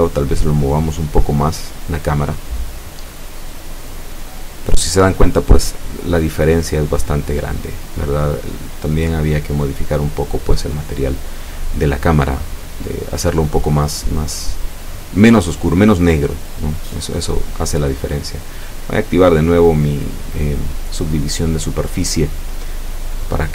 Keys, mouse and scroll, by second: 17.1 Escape, 17.5-21.4 middle drag, 21.6-22.0 scroll up 1, 22.0 middle click.